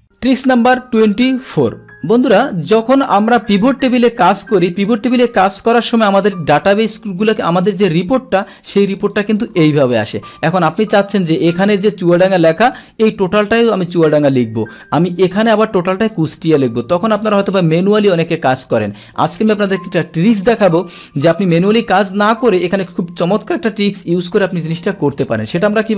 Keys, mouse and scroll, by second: 4.2 click, 6.2-8.1 drag, 8.4-9.8 scroll down 2, 8.9 click, 12.4-13.9 drag, 15.2 click, 17.1 click, 22.2 click.